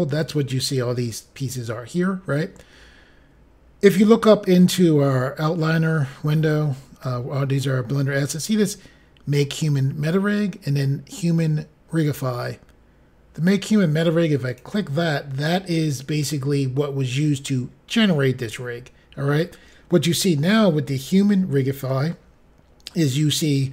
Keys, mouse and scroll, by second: 14.4 click.